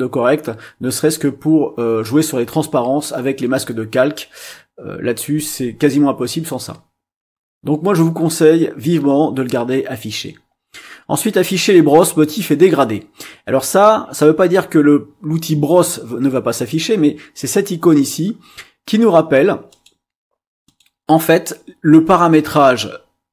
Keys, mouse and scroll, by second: 19.7 click, 20.6 click.